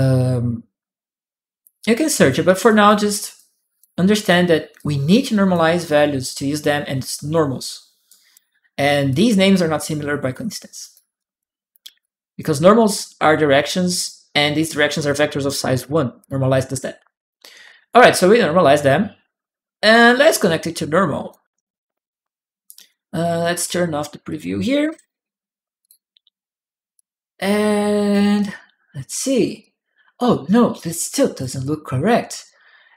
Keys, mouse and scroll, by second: 1.6 click, 2.4 click, 3.1 click, 4.0 click, 4.5 click, 7.9 right click, 7.9 click, 8.9 click, 8.9 right click, 10.6 click, 11.0 right click, 11.0 click, 11.8 click, 12.5 click, 13.4 click, 16.0 click, 17.5 click, 17.5 right click, 20.2 click, 22.4 right click, 23.0 right click, 23.0 click, 24.1 click, 24.7 shift+p, 25.6 click, 26.7-27.9 drag, 28.2 click, 28.2 right click, 29.4-30.5 drag, 30.8 right click, 31.4 click, 32.7 click.